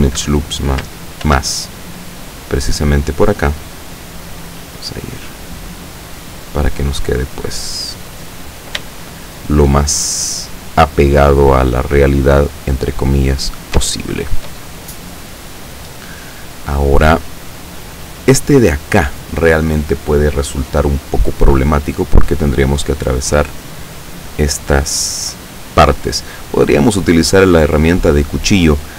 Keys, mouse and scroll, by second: 0.2 Escape, 1.3 ctrl+r, 1.8 ctrl+click, 2.8 click, 4.8 click, 5.9 right click, 6.5-8.5 drag, 8.9 shift+middle click, 11.5 right click, 12.0-13.5 drag, 14.0 shift+middle click.